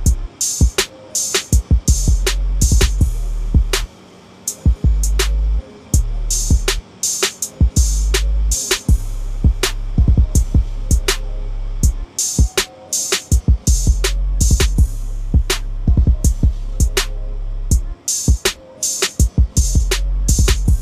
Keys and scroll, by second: 5.3 ctrl+-.